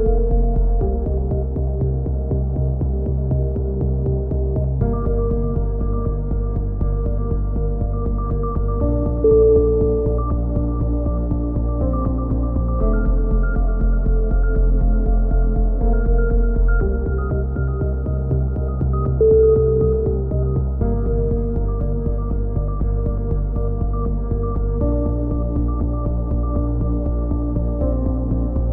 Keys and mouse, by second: 1.6-2.8 right drag, 2.8-4.1 drag, 4.1 right click, 4.4 click, 4.7 a, 4.8 z, 5.6 Tab, 6.0 z, 6.3 a, 6.9 Tab, 8.6 middle click, 10.6-11.7 middle drag, 11.7-13.0 right drag, 14.9 a, 15.3-16.8 middle drag, 17.3 ctrl+r, 19.3-21.1 middle drag, 21.1-22.5 right drag, 22.9 right click, 23.1 click, 26.0-27.0 drag, 27.8 a, 28.1-28.7 drag.